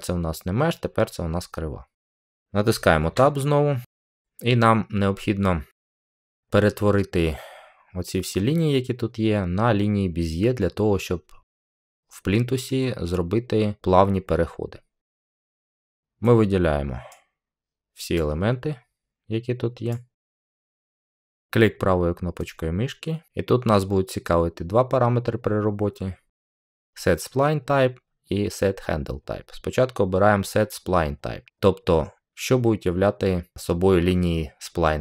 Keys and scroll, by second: 3.0 Tab.